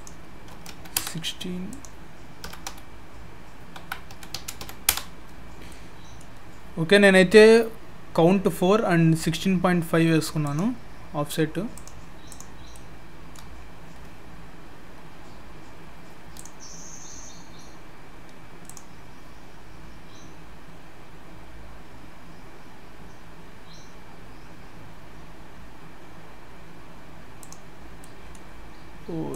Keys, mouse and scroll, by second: 1.7 click, 5.7 middle click, 10.4 click, 12.3 click, 12.6 scroll down 4, 12.7 middle click, 13.5-15.3 scroll up 1, 15.3-15.7 scroll up 2.